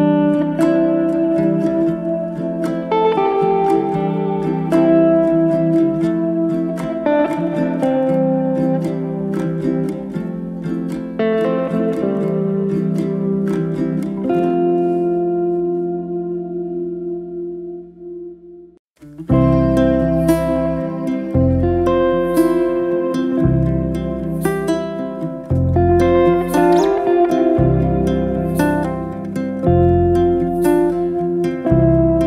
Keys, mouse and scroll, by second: 0.3-0.8 shift+middle drag, 0.8 e, 2.7 scroll down 2, 2.9-4.2 middle drag, 4.2 1, 5.2-5.7 middle drag, 5.7 2, 6.8 2, 6.9 click, 7.5 3, 7.7 click, 8.2 alt+click, 8.9 alt+e, 11.1-12.7 middle drag, 12.7 alt+z, 13.2 middle click, 13.6 1, 14.0-15.3 middle drag, 15.3 click, 15.9-17.5 middle drag, 17.5 g, 19.1 middle click, 19.8 click, 20.1 click, 20.6 middle click, 21.2 g, 22.2 2, 22.4 middle click, 23.0 alt+z, 23.2 middle click, 23.7 2, 25.7 alt+click, 26.4 ctrl+b, 29.1 click, 29.6 alt+click, 30.4 alt+click, 30.7-32.2 middle drag.